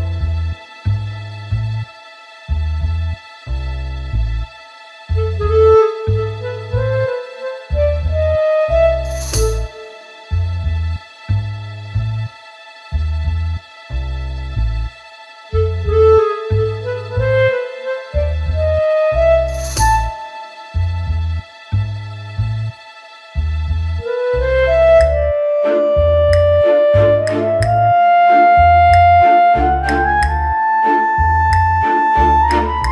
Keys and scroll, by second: 17.1 ctrl+t, 30.8 ctrl+space, 31.3 ctrl+space, 31.5 ctrl+space, 31.6 ctrl+space, 31.6 ctrl+space.